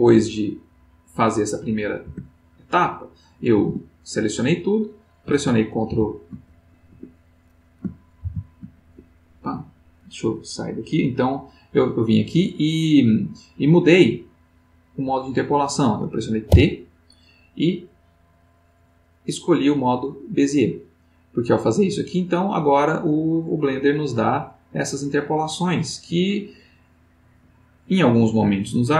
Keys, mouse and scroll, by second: 0.9 click, 1.5 click, 2.0 Tab, 3.6 a, 5.9 ctrl+t, 6.9 Escape, 8.2 shift+t, 8.7 shift+Escape, 11.2 click, 16.5 t, 19.8 click, 21.5-28.9 drag.